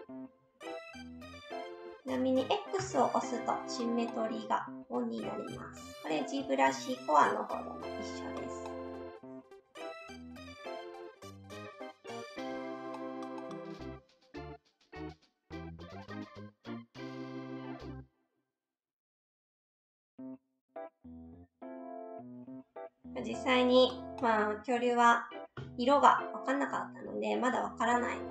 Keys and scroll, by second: 2.8 x, 12.9 s, 13.7 ctrl+z, 13.8 s, 16.5 ctrl+z, 16.7 s, 24.2 s, 25.6 s.